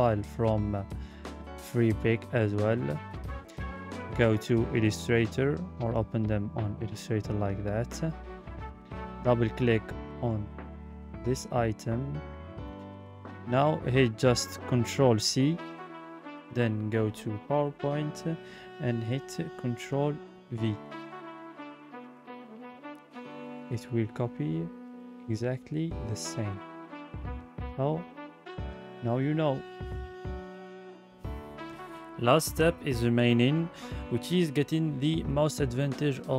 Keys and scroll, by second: 14.2 ctrl+c, 17.8 ctrl+c, 19.5 Delete, 20.6 ctrl+v.